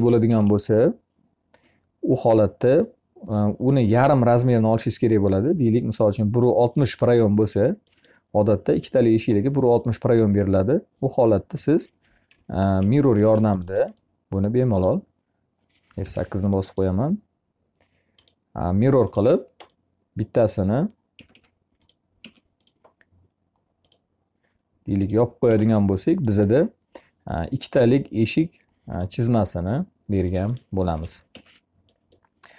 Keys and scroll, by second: 0.1 Escape, 12.0 m, 15.9 F8, 20.5 Escape, 30.2 e, 31.1 Escape.